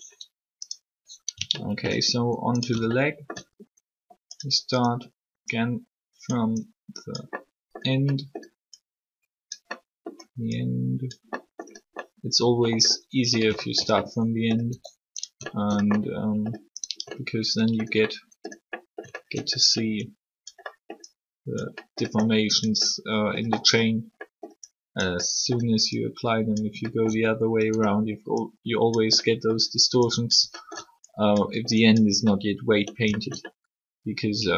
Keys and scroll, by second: 14.7 alt+r.